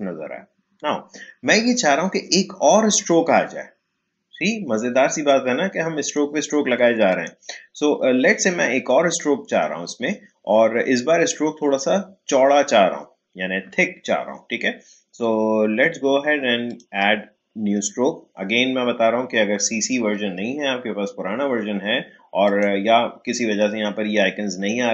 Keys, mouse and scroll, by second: 0.1 alt+scroll up 1, 5.2-7.1 drag, 16.6 click, 22.4 click.